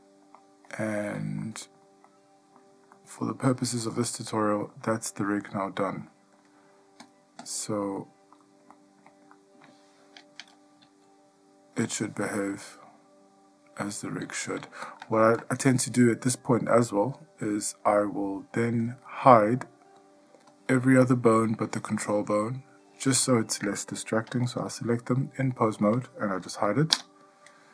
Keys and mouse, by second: 0.1-0.6 ctrl+middle drag, 0.9-1.3 middle drag, 1.6-2.0 shift+middle drag, 2.3-2.8 middle drag, 3.1-3.6 shift+middle drag, 4.2-4.8 middle drag, 5.1-5.6 shift+middle drag, 6.3-6.6 shift+middle drag, 7.2 click, 8.2-8.5 middle drag, 8.9 ctrl+middle click, 9.5-9.8 shift+middle drag, 11.0 g, 20.7-22.5 drag, 27.1 h.